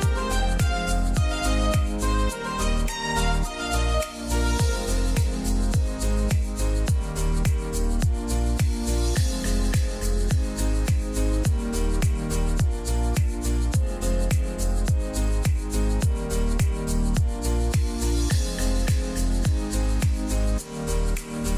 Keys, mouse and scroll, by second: 0.7 shift+right click, 2.3-9.8 drag, 11.4 click, 13.0-18.9 drag, 18.9-19.5 scroll down 1, 21.4 scroll up 1.